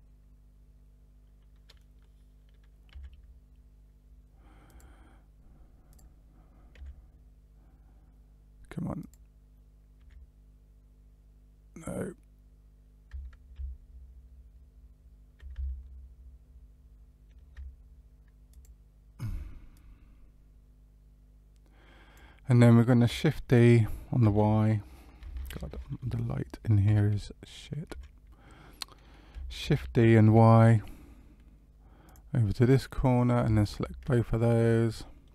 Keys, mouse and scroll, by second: 2.8 g, 5.8 click, 6.7 g, 10.6 g, 19.7 click, 24.2 shift+f, 26.8 y, 27.8 y, 29.6 shift+d, 33.5 shift+click, 34.3 middle click.